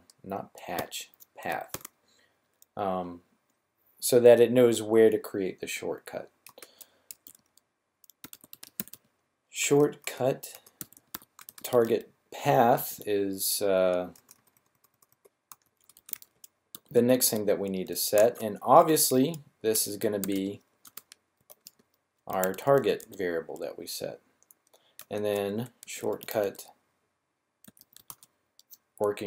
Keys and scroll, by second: 0.7 typing, 1.7 typing, 6.7-12.8 typing, 13.9-17.0 typing, 18.2-21.2 typing, 22.3-22.9 typing, 25.5-26.3 typing, 27.5-29.2 typing.